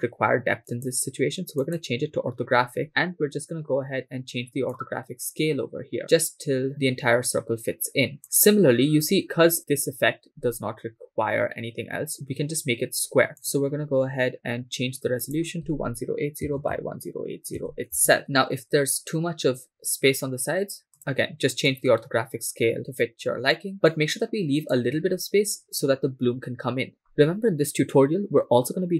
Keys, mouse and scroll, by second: 4.7-8.2 drag, 13.4 click, 15.2-17.9 drag, 16.8 0, 21.0 click, 21.7-24.8 drag.